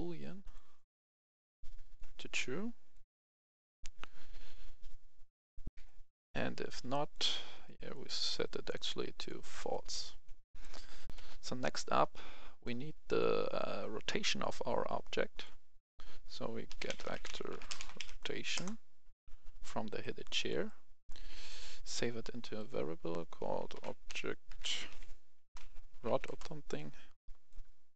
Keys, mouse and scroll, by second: 5.6 F11, 5.6 F10, 6.5 click, 10.3 right click, 11.0 F11, 11.0 F10, 12.5-16.0 drag, 16.5-17.9 typing, 18.4 Return, 19.9 click, 20.3 right click, 21.5 click, 23.6-24.8 typing, 25.8 typing, 26.2 Return, 27.8-27.9 drag.